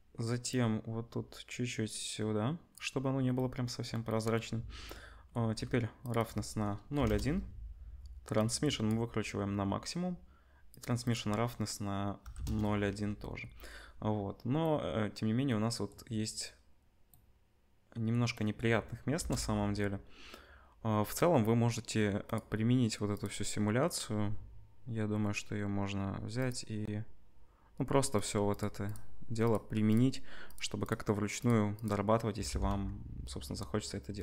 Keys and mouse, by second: 19.1 KP_0, 22.3 middle click, 23.1 click, 23.2-26.4 middle drag, 26.4-28.2 drag, 28.2 middle click, 32.5 r.